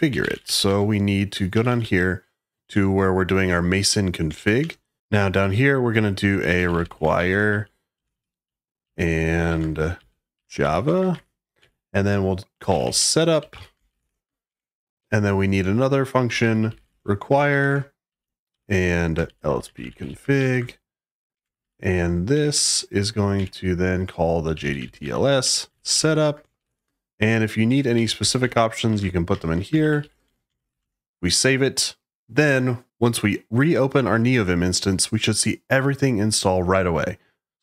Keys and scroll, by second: 0.0-2.5 typing, 4.2 shift+o, 4.5 Return, 5.0 shift+o, 6.3-14.9 typing, 7.4 Left, 15.9-21.5 typing, 21.2 Escape, 22.2 Escape, 22.5-31.1 typing, 27.6 Escape.